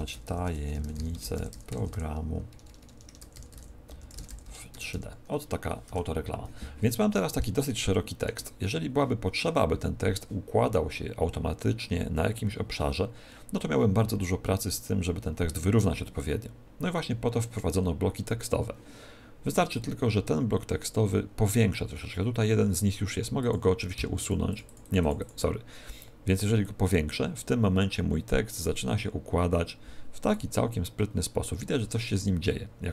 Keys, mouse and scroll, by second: 0.0-4.8 typing, 5.8 Tab, 7.0 scroll down 1, 7.5 shift+middle click, 21.2-22.8 scroll down 1, 23.0 scroll down 1, 23.3 click, 24.1 click, 24.6 click, 24.7 click, 25.1 click, 26.5 click.